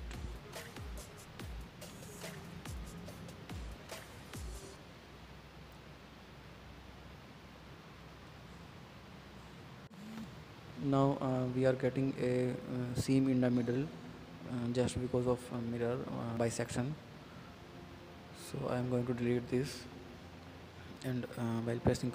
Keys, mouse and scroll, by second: 0.0 click, 0.3-1.3 middle drag, 1.3 click, 1.8-2.8 middle drag, 2.8 click, 3.3-4.8 middle drag, 5.1 middle click, 5.6 click, 5.8 click, 6.3-7.5 middle drag, 7.5 Tab, 7.6 scroll down 2, 7.8 middle click, 8.3-8.8 scroll up 3, 8.8 scroll down 2, 8.9 middle click, 9.6-10.3 scroll up 2, 10.3 scroll down 1, 10.6-12.1 middle drag, 12.3-13.9 middle drag, 14.9 ctrl+click, 15.4 ctrl+click, 16.3 shift+click, 16.9-18.3 middle drag, 18.3 x, 19.1 middle click, 19.4 scroll down 3, 19.6-22.1 middle drag.